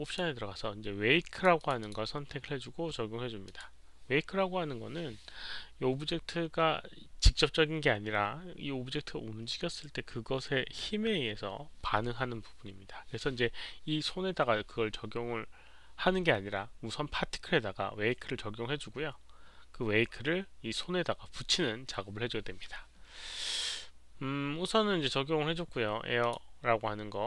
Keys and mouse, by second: 0.0 click, 1.3 click, 1.5 click, 1.8 click, 3.4 click, 8.0 click, 26.2 click.